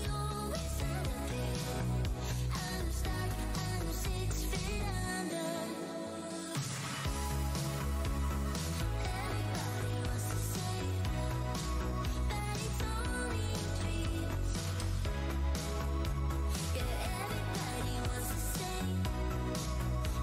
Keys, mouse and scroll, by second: 0.3 Tab, 0.9 click, 0.9 Tab, 1.4 space, 1.7-2.2 scroll down 1, 2.6 alt+w, 2.7-5.8 typing, 5.9 click, 7.3 shift+z, 7.9 Tab, 8.7-11.9 typing, 10.1 scroll down 1, 11.5 Tab, 11.9-12.4 scroll down 2, 12.6 alt+Tab, 15.7 alt+Tab, 16.3 Tab, 17.7 alt+click, 18.3 shift+Tab, 19.6 alt+click, 20.1 shift+Tab.